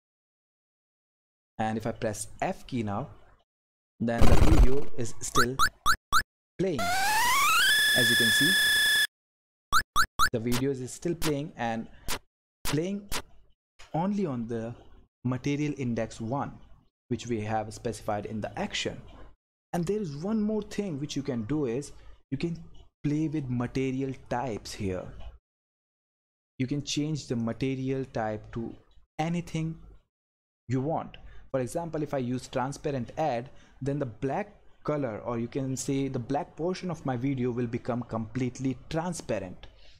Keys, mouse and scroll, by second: 3.3 f, 4.5 Right, 7.7 Up, 8.6 Right, 10.1 Left, 10.4 Down, 10.8 Left, 12.4 Up, 13.0 Right, 18.1 click, 24.2 click, 33.1 click.